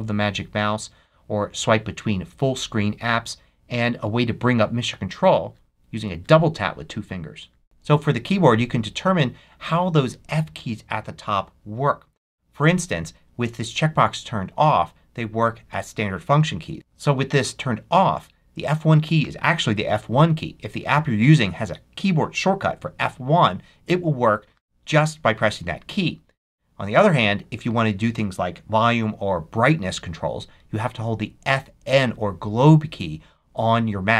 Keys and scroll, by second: 7.6 alt+super+2.